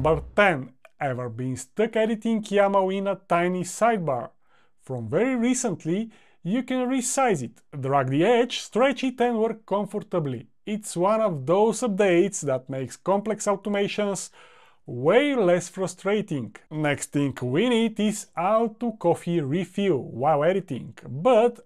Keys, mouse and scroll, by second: 10.0 click.